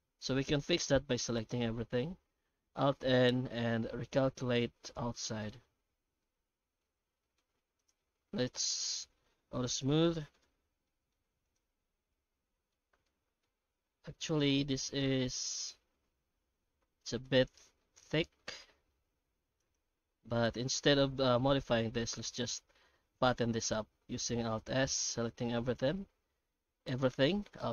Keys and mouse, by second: 0.6 middle click, 1.3 middle click, 1.7 a, 2.7 alt+n, 5.9 Tab, 6.2-7.4 middle drag, 7.8-8.1 shift+right drag, 8.1 shift+q, 10.8 middle drag, 11.4 right click, 11.7 Tab, 12.2 middle click, 12.8 Tab, 13.1 middle click, 13.6 Tab, 14.4-17.2 middle drag, 17.8-18.9 middle drag, 19.0 Tab, 19.6 right click, 19.8 Tab, 20.2 middle click, 21.9 a, 22.7 middle click, 24.3 shift+middle click, 26.0 alt+s.